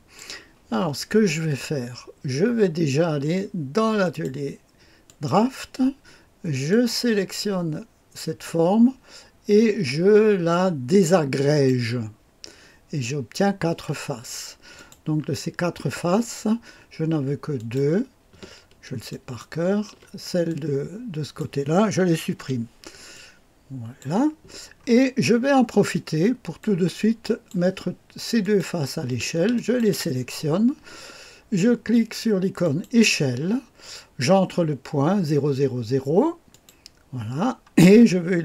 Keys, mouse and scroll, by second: 4.0 click, 5.0 click, 6.7 click, 11.4 click, 14.7 click, 17.5 click, 19.1 ctrl+click, 20.4 click, 22.3 Delete, 23.1 click, 24.5-25.9 scroll up 1, 25.9 click, 26.9 click, 28.4 click, 29.5-30.6 ctrl+drag, 32.6-37.3 drag.